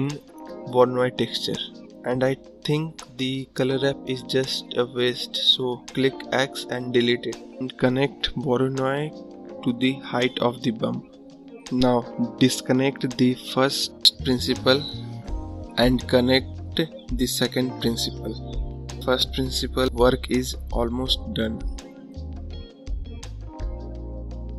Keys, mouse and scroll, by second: 0.4 click, 1.2 x, 4.2-5.9 drag, 6.6 scroll up 4, 7.3 scroll up 1, 10.7-20.6 drag.